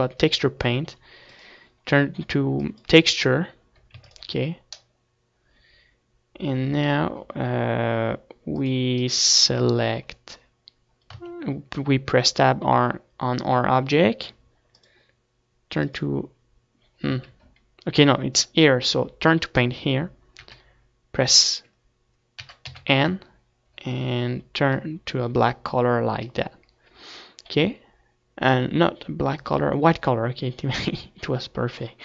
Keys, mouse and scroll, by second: 1.4-3.3 drag, 3.8-5.3 middle drag, 4.1 ctrl+s, 12.4 Tab, 15.1-16.8 drag, 17.4 Tab.